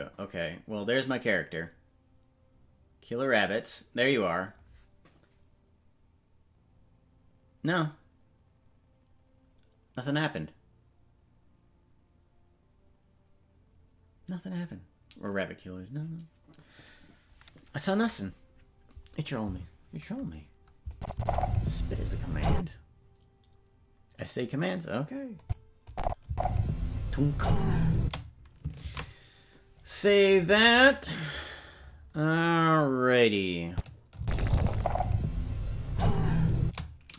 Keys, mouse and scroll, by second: 20.9 click, 21.1 space, 22.5 space, 25.4 click, 25.8 click, 26.2 space, 28.0 space, 31.2 ctrl+s, 33.7 click, 34.1 space, 36.6 space.